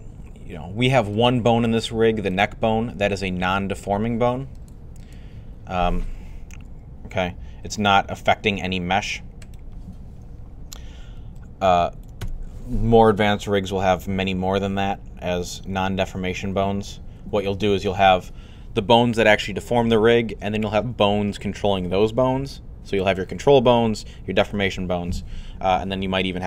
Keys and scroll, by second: 6.3 r, 8.4 typing.